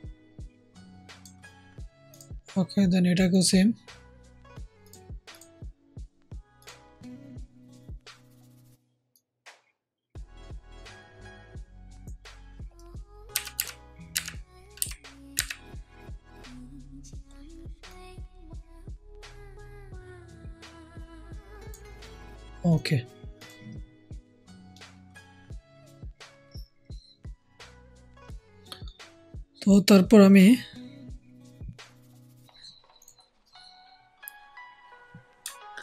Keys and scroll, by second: 13.3 Down, 13.5 Down, 14.0 Up, 14.7 Down, 15.3 Up.